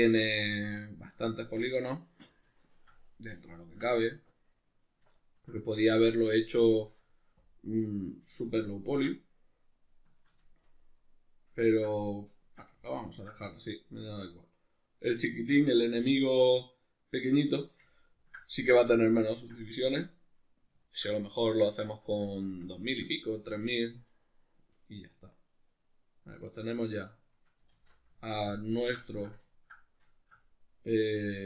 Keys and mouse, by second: 19.9 Tab, 27.7 alt+q.